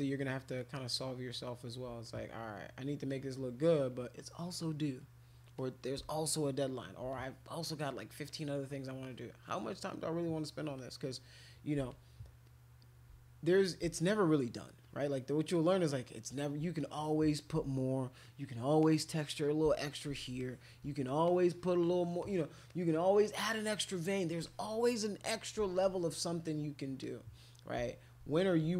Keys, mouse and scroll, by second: 0.4 shift+click, 0.6 shift+click, 0.7 shift+click, 1.0 shift+click, 1.5 shift+click, 2.0 click, 3.1 click, 4.4 click, 5.0 click, 5.6 click, 6.1 shift+click, 7.1 click, 7.8 click, 8.3 click, 9.0 click, 9.7 click, 10.2 click, 10.8 click, 11.9 shift+click, 12.5 shift+click, 13.1 click, 14.0 shift+click, 14.9 shift+click, 15.1 shift+click, 15.3 shift+click, 15.5 shift+click, 15.8 shift+click, 16.8 click, 18.2 click, 18.8-19.9 drag, 20.4 alt+click, 21.3 alt+click, 22.2 alt+click, 22.7 alt+click, 23.2 alt+click, 23.8 alt+click, 24.4 click, 25.8-26.8 drag, 27.0 click, 28.5-28.7 alt+drag.